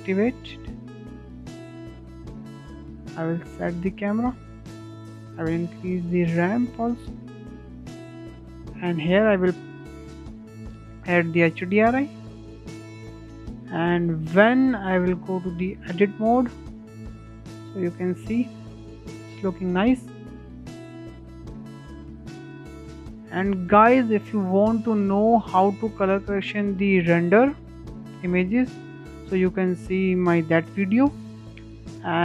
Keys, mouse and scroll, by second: 4.0 click, 4.4 s, 6.3-8.8 shift+middle drag, 8.8 click, 10.3 click, 10.9 click, 12.4 click, 15.1 click, 19.3 click, 20.0 KP_0, 20.5-20.8 scroll down 3, 20.8-22.4 middle drag, 22.4-22.8 scroll up 2, 22.8-23.4 shift+middle drag, 23.7-26.3 shift+middle drag, 26.3 click, 26.8 middle click, 27.7-28.0 scroll up 2, 28.0-32.2 shift+middle drag.